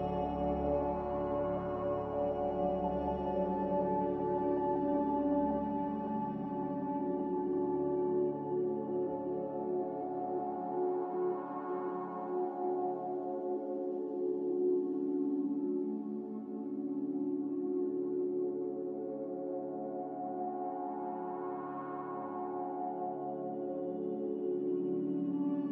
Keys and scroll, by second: 0.0-0.5 typing, 3.3-4.0 typing, 9.4-10.3 typing, 16.4 g, 18.7 g, 23.4 z, 25.0 a.